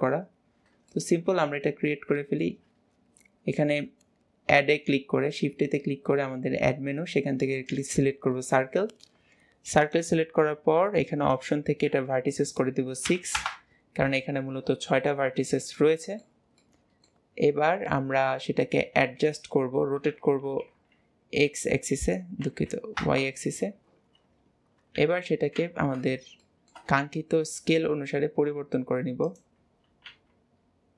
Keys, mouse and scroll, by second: 0.7-1.0 scroll down 5, 1.0-1.3 shift+middle drag, 1.3 scroll up 1, 9.9-14.5 drag, 15.8-16.7 middle drag, 25.0 KP_3, 25.6 alt+z, 26.4-27.1 shift+middle drag, 27.1 s, 29.6 scroll up 4, 30.1 g.